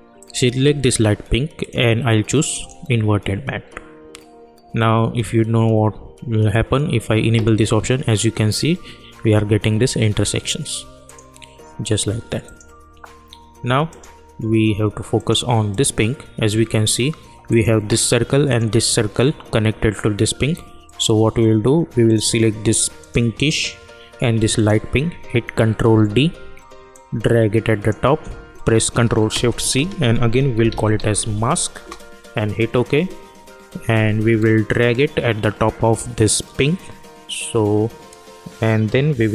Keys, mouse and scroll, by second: 7.3 click, 11.0 click, 24.5 ctrl+click, 25.8 ctrl+d, 26.9-29.5 drag, 29.5 ctrl+shift+c, 30.3-31.7 typing, 31.7 Return.